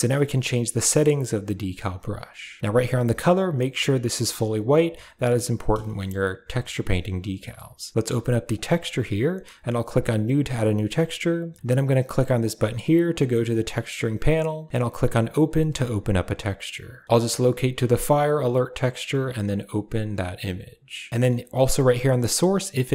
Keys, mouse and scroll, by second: 3.3-4.4 drag, 5.8 shift+middle click, 9.7 click, 19.3 click, 22.2-22.9 drag.